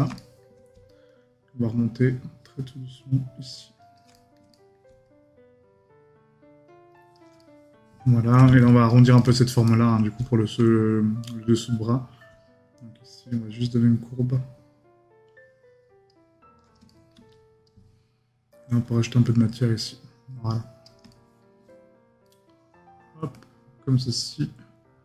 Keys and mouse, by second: 0.2 right click, 4.1 right click, 7.4 right click, 9.2 right click, 16.9 right click, 21.1 right click.